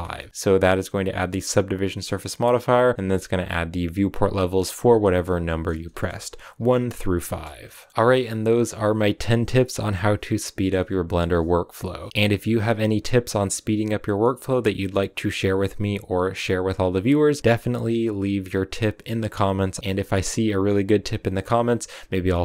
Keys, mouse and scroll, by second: 5.2 scroll up 1, 7.1 ctrl+5, 7.4-22.4 middle drag.